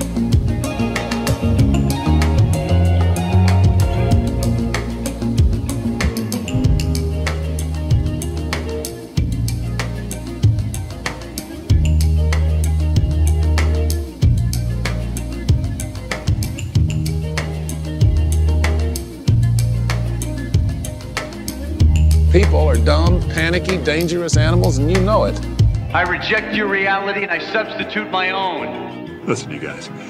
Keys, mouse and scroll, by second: 5.4 click, 9.3 click, 9.5-10.8 drag, 11.1 click, 12.3-15.6 middle drag, 17.0 Tab, 18.1 click, 18.8 shift+click, 20.4 g, 20.6 y, 24.9 click, 25.8 click, 26.3 middle click, 27.6 click, 28.1 g, 28.4 x, 29.8 click, 29.8 typing.